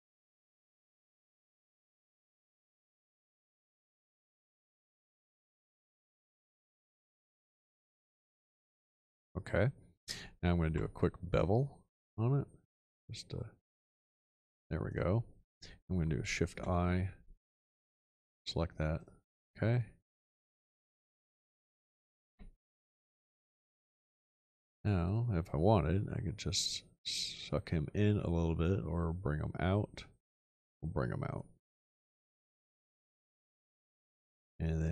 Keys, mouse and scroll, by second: 6.1-6.8 shift+middle drag, 6.1-6.8 scroll down 3, 10.7 b, 16.5 shift+\, 22.3 x.